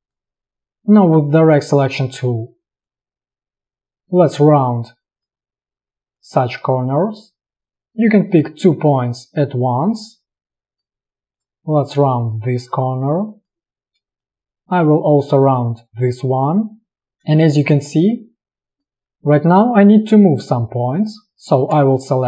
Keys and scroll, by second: 0.6 alt+space, 2.0 a, 14.2 space, 17.4 space, 21.9 space.